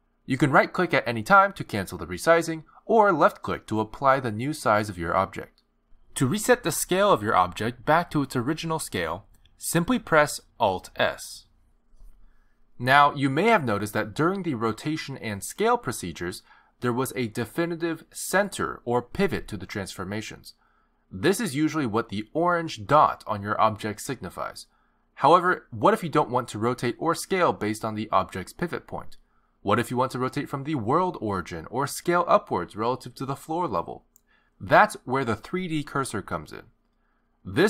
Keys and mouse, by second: 3.2 s, 11.6 alt+r, 12.3 alt+s, 13.6 alt+g, 17.8 r, 19.2 s, 22.9 g.